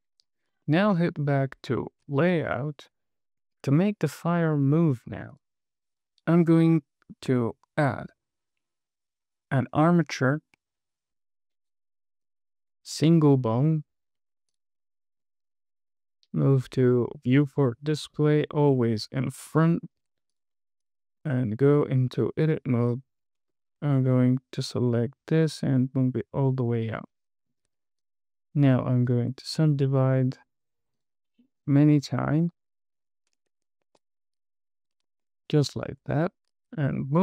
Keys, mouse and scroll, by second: 0.6 scroll down 2, 1.0 shift+middle click, 2.6 space, 5.6 click, 6.3 click, 7.1 shift+middle click, 8.3 shift+a, 14.8 click, 15.6-16.4 scroll down 3, 17.7 click, 18.8 click, 19.4-19.8 scroll up 2, 20.0 shift+middle drag, 20.6 click, 21.1 click, 21.6 Tab, 23.2 click, 23.8 g, 25.1 z, 26.8 click, 27.2 scroll down 1, 27.5 shift+middle click, 28.3 click, 28.8 right click, 30.3 right click, 30.9 right click, 31.6 right click, 32.2 right click, 34.2 super+z, 35.6 shift+middle click, 36.3 Tab, 36.5 KP_1.